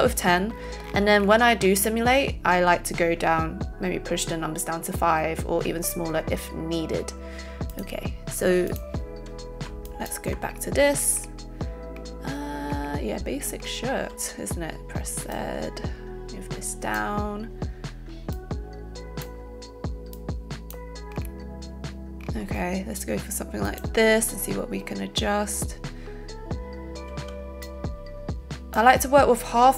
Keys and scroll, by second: 14.1 z, 27.2 z.